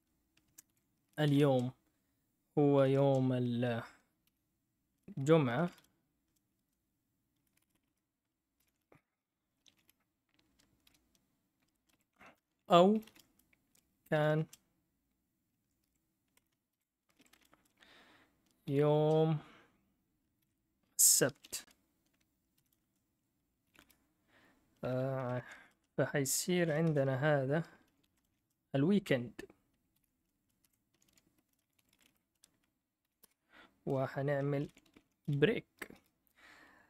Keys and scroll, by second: 0.0-1.7 typing, 2.7 =, 2.8 =, 3.0 space, 4.0-6.2 typing, 7.4-13.2 typing, 14.2 typing, 15.6-19.4 typing, 20.4-28.7 typing, 29.9-33.0 typing, 33.2 Return, 34.3-35.9 typing.